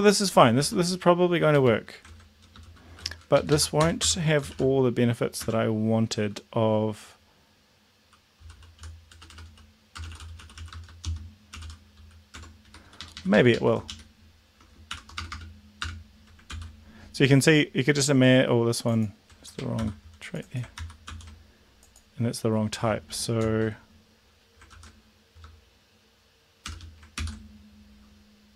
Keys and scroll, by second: 0.6 Tab, 1.5 BackSpace, 2.8 shift+], 3.3 Left, 3.4 Left, 3.8 Return, 4.0 Return, 4.5 shift+-, 5.4 Tab, 8.4-11.5 typing, 12.4 Tab, 12.6 Right, 12.8 Up, 13.0 Up, 13.1 Up, 13.3 Up, 13.5 Up, 14.9 shift+Home, 15.2 BackSpace, 16.4 ctrl+s, 19.8 ctrl+c, 20.8 ctrl+v, 21.0 ctrl+s, 23.4 Return, 24.7 ctrl+z, 26.7 shift+7, 27.1 ctrl+s.